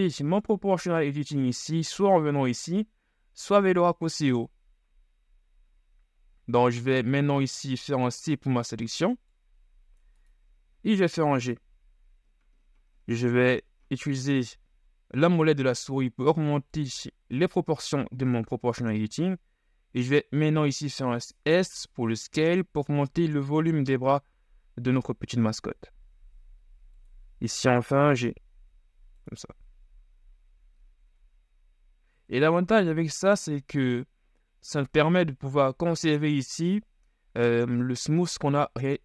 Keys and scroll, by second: 7.9 [, 11.5 shift+g, 18.2 s, 27.9 g, 29.7 z, 31.3 Tab, 35.7 shift+z.